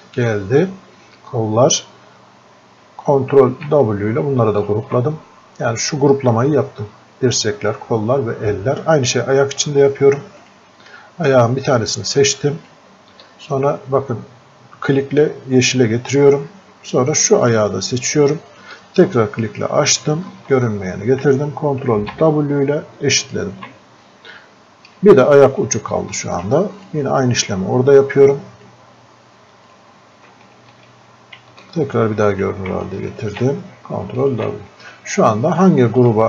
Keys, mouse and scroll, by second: 3.4 ctrl+w, 4.6 ctrl+shift+click, 9.1 ctrl+shift+click, 10.5 ctrl+shift+click, 12.7-22.0 ctrl+shift+drag, 22.0 ctrl+w, 23.3 ctrl+shift+click, 25.8 alt+click, 26.8-33.2 ctrl+shift+drag, 33.2 ctrl+w, 34.3 ctrl+shift+click.